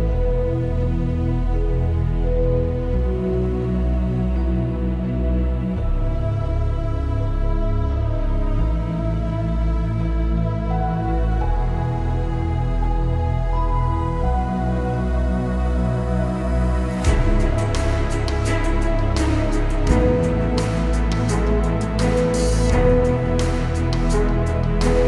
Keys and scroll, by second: 10.0 F9, 12.2 F9, 15.4 ctrl+d.